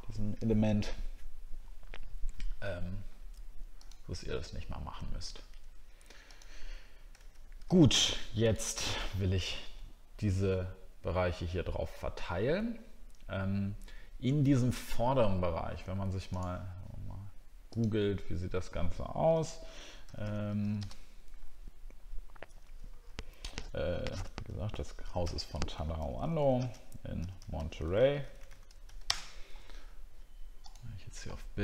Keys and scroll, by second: 9.1-9.5 alt+scroll up 2.